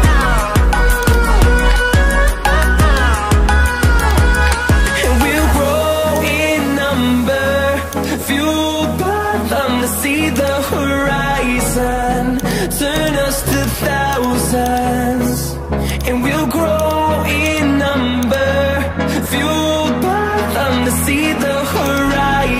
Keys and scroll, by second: 9.1 ctrl+i.